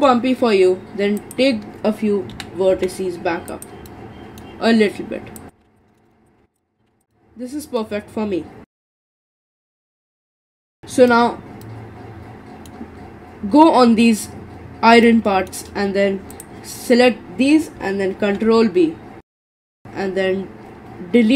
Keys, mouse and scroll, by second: 1.2 click, 2.3 g, 3.9-5.4 middle drag, 5.4 click, 5.6 g, 5.8 middle click, 6.1 scroll down 1, 6.3 click, 6.4 g, 6.6 middle click, 6.9 g, 7.1-13.0 middle drag, 13.0-14.6 scroll up 3, 14.6-15.0 scroll up 3, 15.0-16.3 shift+middle drag, 16.3 click, 18.2 ctrl+b.